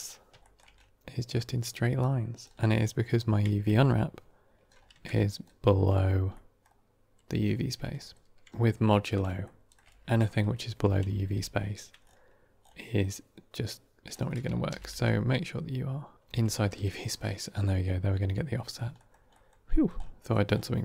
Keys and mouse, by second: 0.3 shift+middle drag, 3.6 Tab, 6.2-6.5 middle drag, 11.3 ctrl+space, 14.6 g, 16.2 Tab, 18.5 middle click, 18.8 middle click, 19.2 middle click, 19.6 middle click, 20.2 middle click.